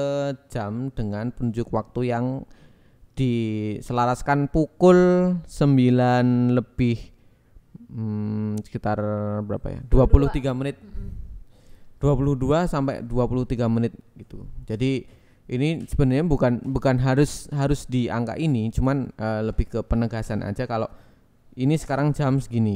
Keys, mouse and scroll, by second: 0.3 click, 1.6 g, 1.9 z, 4.0 click, 5.5 g, 5.8 z, 6.5 click, 6.7 Tab, 7.0 Tab, 7.3 click, 8.1 g, 8.4 z, 9.1 click, 9.8 click, 9.9 Tab, 11.1 click, 12.1 g, 12.2 y, 13.4 click, 13.5 KP_1, 14.2 Tab, 14.5 a, 15.0 s, 15.9 click.